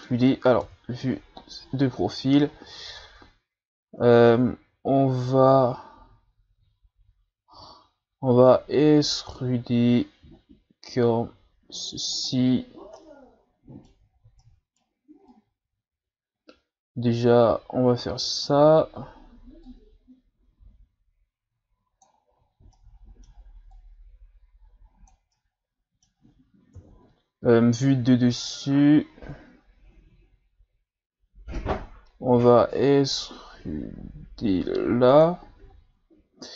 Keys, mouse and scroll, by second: 0.6 KP_3, 1.4-2.0 ctrl+scroll down 2, 2.0 z, 2.5 ctrl+scroll down 2, 3.0-4.1 shift+scroll up 3, 4.2-5.0 ctrl+scroll down 2, 5.0-5.5 scroll up 1, 8.3 e, 12.4 z, 12.9-14.1 middle drag, 14.1 shift+scroll down 2, 14.4 middle click, 15.3-18.3 drag, 19.7-22.7 drag, 22.7 middle click, 23.7-25.3 drag, 25.3-26.7 middle drag, 26.7 KP_7, 28.5-29.5 ctrl+scroll down 2, 31.1 z, 32.3 e.